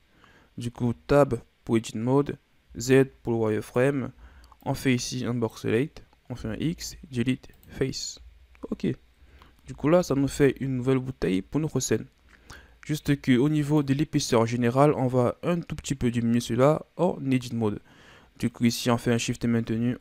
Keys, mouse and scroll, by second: 0.7 Tab, 2.7 z, 3.6 right click, 4.2 b, 6.4 x, 8.2 z, 9.2 KP_1, 9.6 Tab, 10.1 a, 11.0 scroll down 2, 12.9-13.7 scroll up 2, 13.7 right click, 18.5 right click.